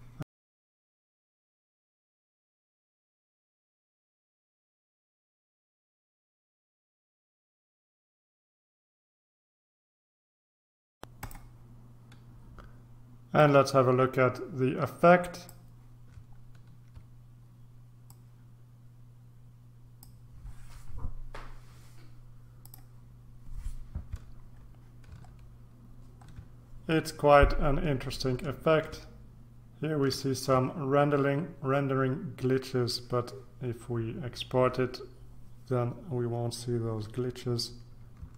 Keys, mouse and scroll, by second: 0.5 click, 0.8 ctrl+click, 2.3 click, 2.7 ctrl+shift+click, 3.1 ctrl+c, 3.2 ctrl+v, 3.3 click, 3.8 ctrl+c, 3.8 ctrl+v, 3.9 ctrl+click, 4.2 ctrl+c, 4.4 click, 4.9 click, 5.0 ctrl+c, 5.1 ctrl+v, 5.2 ctrl+click, 5.4 ctrl+c, 5.4 ctrl+v, 5.5 ctrl+click, 5.7 ctrl+c, 5.7 ctrl+v, 5.8 click, 6.4 ctrl+c, 6.4 ctrl+v, 6.5 click, 7.0 scroll down 3, 7.2 shift+click, 7.6 shift+click, 8.3 click, 8.5 click, 8.6 click, 9.2 click, 9.7 ctrl+scroll up 2, 9.8 ctrl+z, 9.9 ctrl+click, 10.3 click, 10.8 ctrl+scroll down 2, 11.2 click, 13.4-16.0 drag, 16.5-17.1 ctrl+scroll down 2, 18.1-20.6 drag, 22.6 click, 24.6-25.0 scroll down 1, 25.5-26.7 shift+scroll down 1, 28.6-29.1 ctrl+scroll up 2.